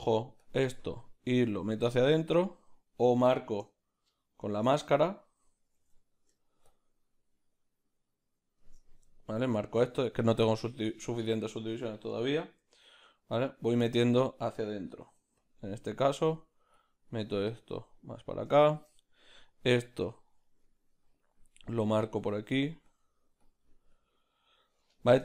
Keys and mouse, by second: 0.8 click, 1.4 middle click, 1.8 ctrl+z, 2.1-4.8 middle drag, 4.8-5.8 ctrl+drag, 5.8 ctrl+z, 8.7 ctrl+shift+click, 9.1-12.6 middle drag, 12.6 m, 12.9-15.1 middle drag, 15.9 click, 16.3 middle click, 16.7 click, 17.2 middle click, 17.6 click, 18.0-19.9 middle drag, 19.9 click, 20.3 middle click, 21.0 click, 21.5 middle click, 22.2 click, 24.3 middle click, 24.9 click.